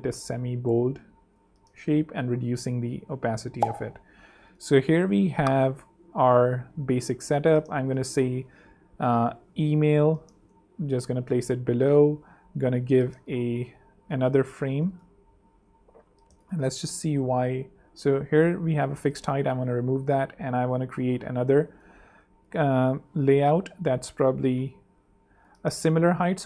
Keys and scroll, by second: 0.3 super+3, 1.2 super+2, 1.6 super+6, 2.1 super+3, 3.7 super+2, 6.5 super+3, 7.3 super+2, 7.7 super+t, 8.2 shift+super+t, 8.3-10.6 typing, 10.7 Down, 12.5 a, 14.4 super+x, 15.9 super+x, 19.0 super+v, 19.8 super+a.